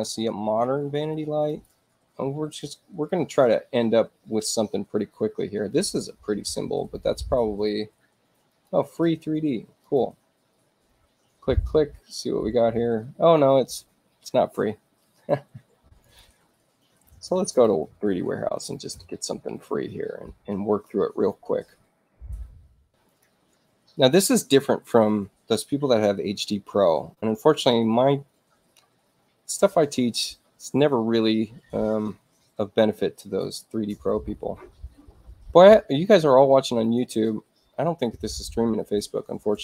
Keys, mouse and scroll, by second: 1.4 click, 8.4 click, 9.7 click, 15.9 click, 16.8-18.2 typing, 22.9 click, 36.5 scroll up 2, 37.1 scroll up 2, 38.0-39.6 middle drag.